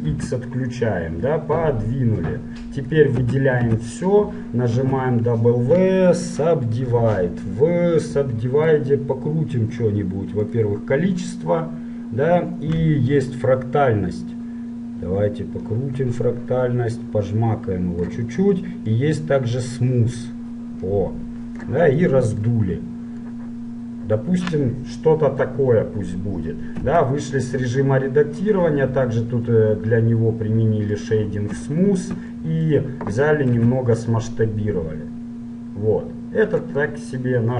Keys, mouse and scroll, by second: 3.4 a, 3.8 a, 5.0 w, 8.4-10.2 drag, 10.2 middle click, 10.6-12.6 drag, 12.6 middle click, 13.5-15.3 drag, 19.1-21.1 drag, 22.2-25.2 middle drag, 27.0 Tab, 31.2-32.8 drag, 32.8 middle click, 33.8 s.